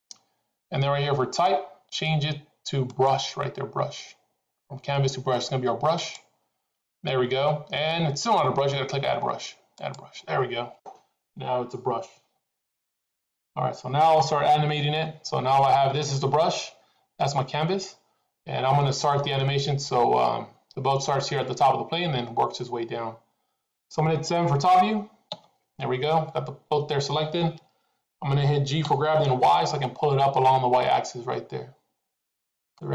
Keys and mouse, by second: 2.8-6.0 drag, 9.6 click, 18.7 middle click, 25.2 KP_7, 28.7 g.